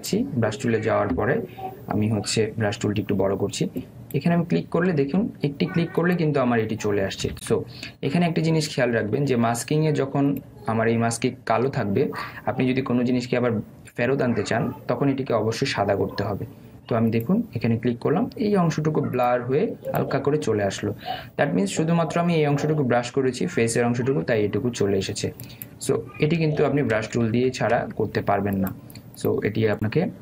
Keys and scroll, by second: 5.9 ctrl+z, 27.4 ctrl+z, 27.9 ctrl+alt+z.